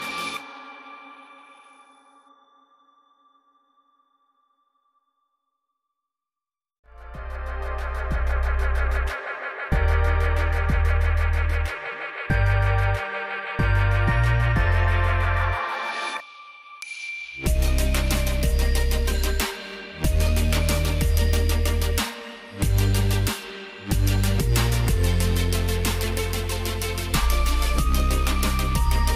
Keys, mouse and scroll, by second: 1.3 click, 6.4 click, 7.5 right click, 18.9 alt+click, 21.5 click, 24.4 alt+click, 25.8 click.